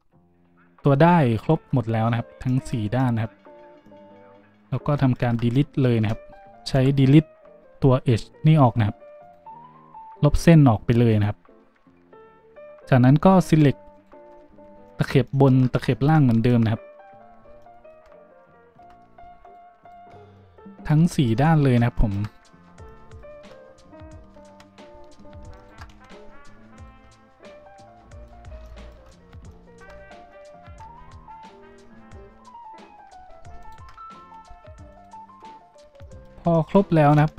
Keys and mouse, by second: 2.5-4.9 drag, 5.0-12.5 ctrl+drag, 6.7 Delete, 12.5 z, 13.5 middle click, 13.9 middle click, 14.4 z, 16.0 shift+z, 17.6-19.4 drag, 19.4 alt+shift+middle click, 19.5 alt+shift+click, 19.8 alt+shift+middle click, 19.9-22.7 alt+shift+drag, 24.4 z, 25.5 alt+shift+middle click, 25.9 z, 26.7 alt+shift+middle click, 31.6 z, 32.8 z, 33.6 alt+shift+click, 33.6 alt+shift+middle click, 33.6 alt+shift+right click, 34.4 alt+shift+z, 34.9 alt+shift+click, 34.9 alt+shift+middle click, 34.9 alt+shift+right click, 37.1 shift+z.